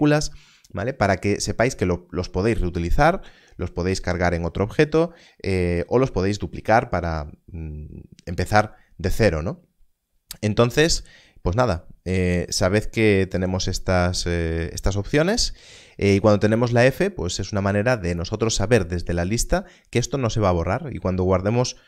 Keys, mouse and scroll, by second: 10.9 click.